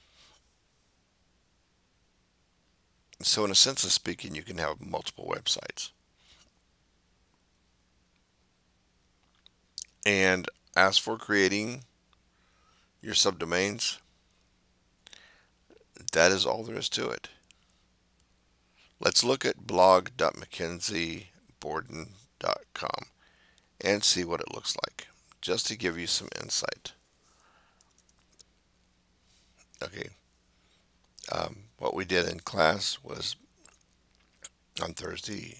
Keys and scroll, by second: 27.6-28.7 typing.